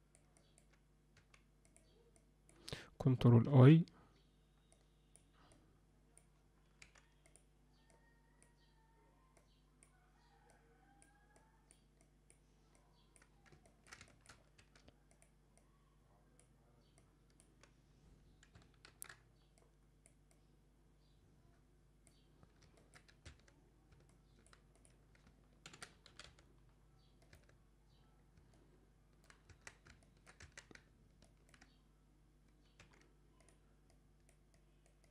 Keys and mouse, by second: 0.4 click, 2.2 click, 3.5 ctrl+i, 4.8 click, 5.5 click, 7.9 click, 9.4 click, 10.5 click, 11.4 click, 12.0 click, 12.8 click, 13.6 ctrl+middle click, 14.0 shift+middle click, 14.6 f, 15.6 click, 17.0 click, 19.0 ctrl+i, 19.6 click, 20.3-22.1 drag, 22.8 ctrl+alt+middle click, 23.6 Tab, 24.1 alt+middle click, 25.6 ctrl+l, 26.0 g, 27.9 Tab, 28.5 middle click, 29.6 Tab, 30.0 ctrl+middle click, 30.8 ctrl+alt+Tab, 31.2 ctrl+middle click, 32.8 f, 33.9 click, 34.6 click, 35.0 click.